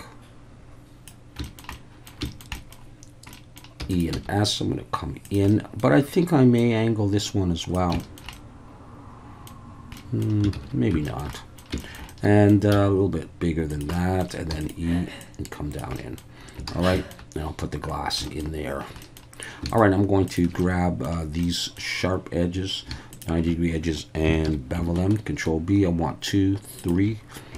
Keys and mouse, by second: 1.5 shift+middle click, 1.8 middle click, 2.3 shift+middle click, 2.5 middle click, 3.4 middle click, 3.8 e, 3.9 click, 4.1 s, 5.2 click, 5.5 middle click, 6.6-7.7 drag, 8.0 shift+middle click, 8.4-9.5 middle drag, 9.9 middle click, 10.5 ctrl+z, 11.0 shift+middle click, 11.3 middle click, 11.8 shift+middle click, 12.1 middle click, 12.7 s, 13.7 click, 14.0 middle click, 14.5 e, 14.6-15.8 drag, 16.0 middle click, 16.7 alt+a, 16.9 shift+middle click, 18.2 shift+middle click, 19.0 middle click, 20.6 middle click, 21.4 middle click, 23.1 alt+shift+click, 24.4 ctrl+b, 26.8 shift+click.